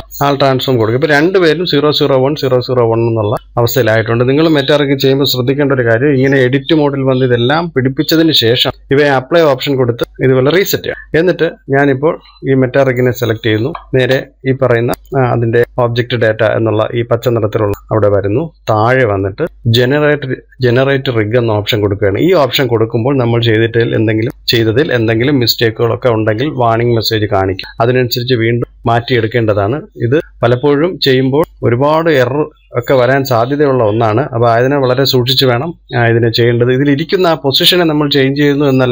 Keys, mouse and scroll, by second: 2.9-5.4 middle drag, 12.3-12.6 scroll down 2, 12.6-16.8 middle drag, 18.8 click, 19.3-19.7 scroll down 2.